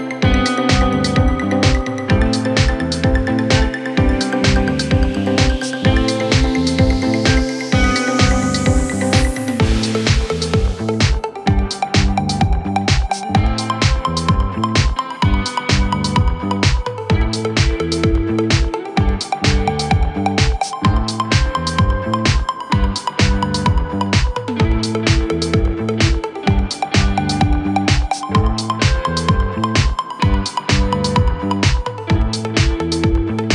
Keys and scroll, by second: 15.1 f, 17.1 f, 18.2 f, 23.0 f, 25.0 f.